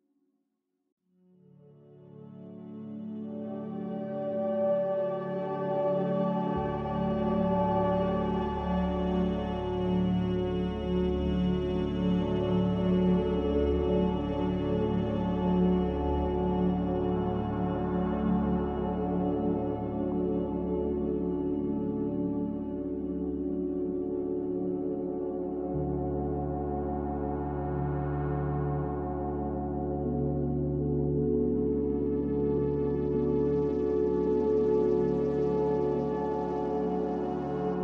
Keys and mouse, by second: 4.8 e, 7.8 g, 13.3 ctrl+z, 15.4-16.8 middle drag, 17.0 middle click, 17.6-19.7 middle drag, 26.1 Tab, 26.8 Tab, 27.8 shift+middle click, 29.2-31.2 middle drag, 31.2-32.3 drag, 31.2-32.3 right drag, 33.0 click, 33.0 right click, 33.0 middle click, 34.2 middle click, 34.8 middle click, 36.1 shift+middle click.